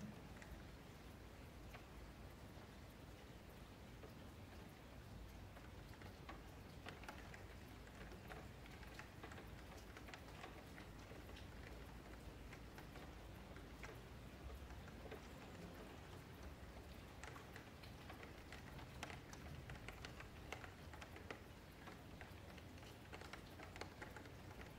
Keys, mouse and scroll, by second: 1.9-3.0 middle drag, 8.6-9.1 scroll up 1, 9.4 alt+click, 10.2 ctrl+x, 11.7 alt+click, 13.1-14.1 scroll down 1, 14.1 ctrl+2, 14.3 ctrl+2, 16.1 ctrl+shift+2, 17.5 alt+click, 19.3 click, 20.9 ctrl+click, 22.5 click, 23.3 ctrl+click, 23.6 ctrl+a, 24.0 shift+middle click, 24.6-24.7 scroll down 2.